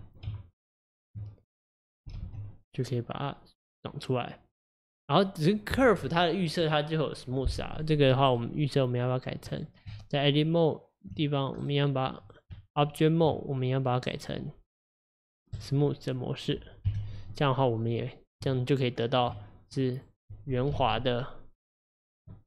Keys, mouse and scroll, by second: 0.3 Tab, 2.2 alt+z, 2.6-5.6 middle drag, 7.7 click, 8.3 right click, 9.6 click, 9.9 Tab, 11.6 right click, 12.4 click, 12.6 Tab, 13.9 click, 14.1 right click, 16.9 KP_1, 18.5 Tab, 19.8 click, 20.8 s.